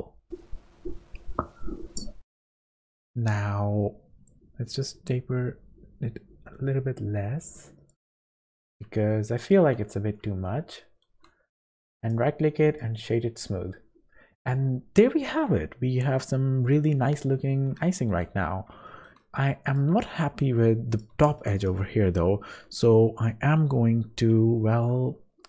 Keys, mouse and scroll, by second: 4.3 click, 8.6 scroll up 4, 9.1 shift+middle click, 9.8 scroll up 2, 10.4 shift+middle click, 11.6 click, 12.0 right click, 17.9 shift+middle click, 18.3-18.7 scroll up 1, 18.9 shift+middle click, 19.2 middle click, 19.6 click, 20.0 Tab, 20.4 scroll up 2, 20.9 click, 21.3 3, 21.6 click.